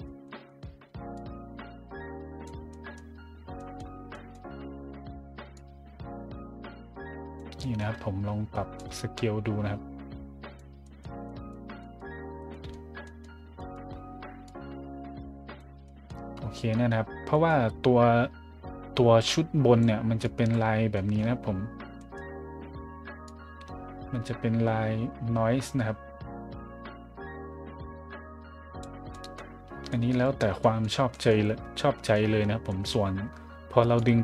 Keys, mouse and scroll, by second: 0.0 middle drag, 0.4 middle drag, 1.1-2.4 drag, 2.7 middle click, 3.3 middle click, 3.5 middle drag, 4.1 middle click, 4.5-5.0 scroll down 2, 5.5-7.4 drag, 7.6-8.0 scroll up 2, 8.7-10.5 drag, 10.8-11.9 scroll up 3, 12.5 scroll up 1, 13.0-13.7 scroll up 2, 14.4-15.6 drag, 15.8 middle drag, 16.5 middle drag, 17.3 middle click, 19.2 click, 20.2 click, 20.9 scroll up 1, 21.7 scroll up 1, 21.7 scroll down 1, 21.9 scroll up 1, 23.2-28.8 drag, 29.1 middle drag, 29.6 middle click, 29.8 middle drag, 30.6 middle drag, 31.1 middle click, 31.7 middle drag, 32.0-32.8 scroll up 3, 33.9-34.2 drag.